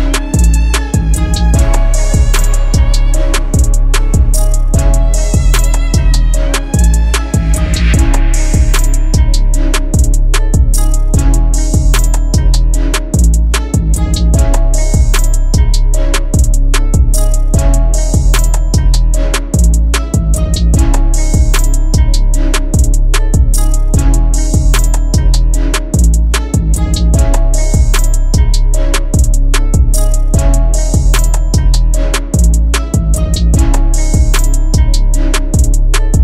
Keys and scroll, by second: 13.8 2, 14.8 /, 15.4 3, 16.9 Return, 33.5 2, 34.6 /, 35.1 6, 35.7 Return.